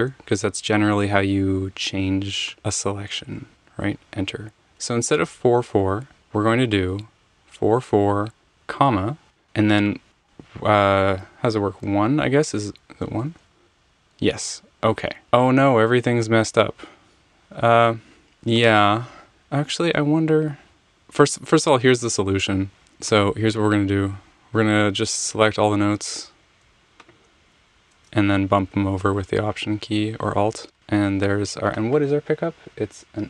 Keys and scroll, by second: 0.9 Escape, 3.2 Return, 6.1 Right, 8.6 /, 13.1 1, 13.3 Return, 22.6 super+z, 28.7 alt+Right, 29.4 alt+Right.